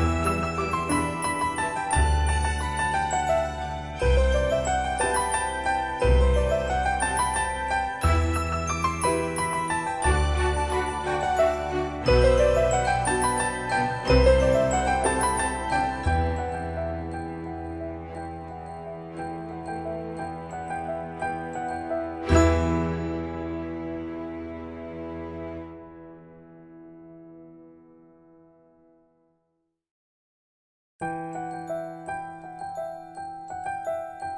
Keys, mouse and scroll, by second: 1.3 shift+middle click, 3.6 click, 4.3 right click, 5.5 shift+middle click, 14.6 shift+middle click, 18.4-21.0 drag, 21.4-22.4 scroll up 1, 23.8-25.9 middle drag, 25.9-27.0 middle drag.